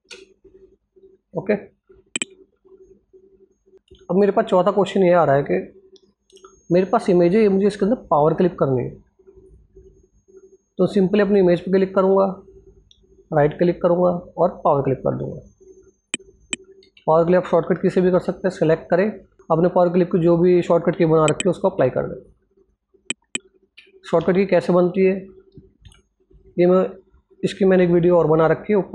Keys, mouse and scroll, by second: 0.9 click, 1.7-2.0 scroll down 1, 2.2 alt+Tab, 2.9 scroll down 1, 4.1 scroll up 1, 4.9 click, 5.3-6.4 scroll down 1, 6.4-8.3 drag, 9.7-10.5 scroll up 1, 10.5 click, 11.1 right click, 14.1 click, 16.5 ctrl+z, 17.3 click, 21.4 alt+z, 21.9 click, 23.3 ctrl+z.